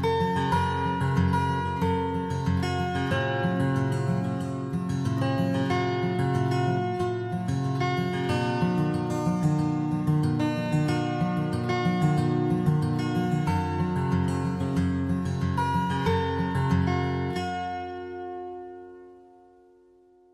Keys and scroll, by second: 6.4 ctrl+-, 7.6 ctrl+0.